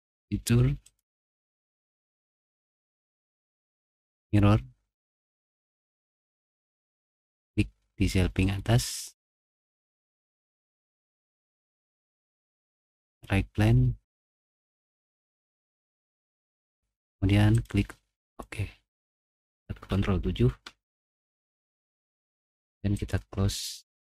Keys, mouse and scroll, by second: 2.1 right click, 4.2 click, 5.9 click, 8.4 click, 9.3 middle click, 14.1 click, 15.9 click, 18.1 click, 19.9 ctrl+7, 22.9 click.